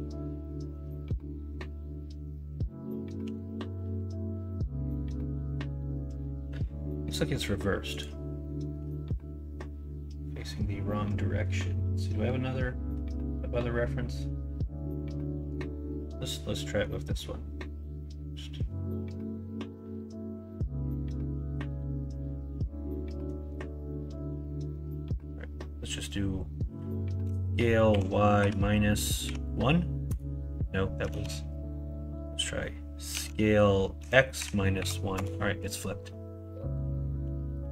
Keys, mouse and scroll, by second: 3.2 g, 31.1 ctrl+z, 33.1 s.